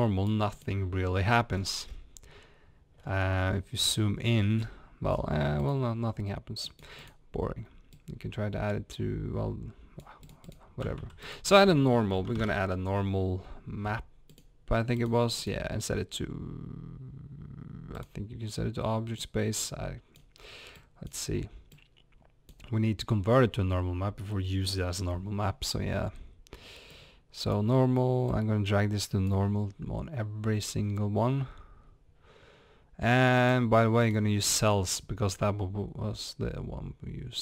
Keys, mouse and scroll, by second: 1.5 scroll up 1, 1.6-2.5 middle drag, 4.6-5.4 scroll down 2, 4.7 middle click, 6.8 click, 7.9 drag, 22.5-24.3 drag, 26.6-27.5 drag, 34.1-37.2 drag.